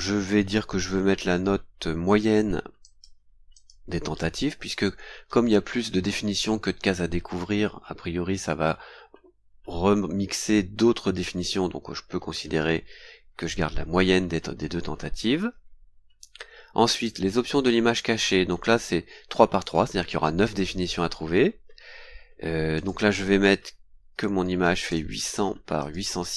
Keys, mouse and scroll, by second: 2.8 click, 3.5 click, 14.5 scroll down 2, 15.9 scroll down 2, 16.9 click, 18.0-18.3 scroll down 2, 22.7 click, 24.1 KP_8, 24.6 KP_0, 25.8 click.